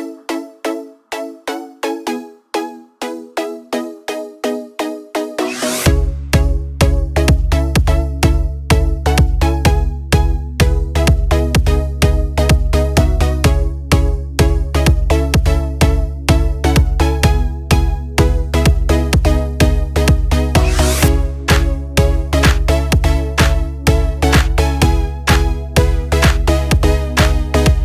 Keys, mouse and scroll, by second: 0.5 click, 3.8 right click, 4.7-9.0 drag, 11.6 click, 21.5 scroll down 1, 22.6 click, 22.7 click, 26.6-27.8 drag.